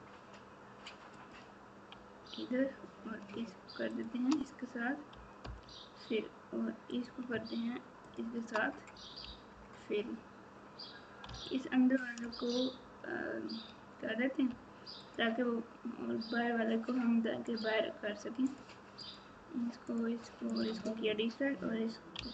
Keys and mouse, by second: 3.9 shift+click.